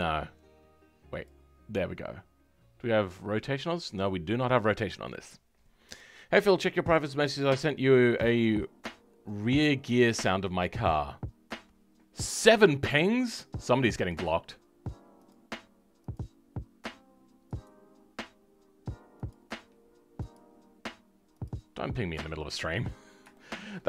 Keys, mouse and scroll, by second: 1.2 click, 22.7-23.2 scroll up 2, 23.2-23.8 shift+middle drag.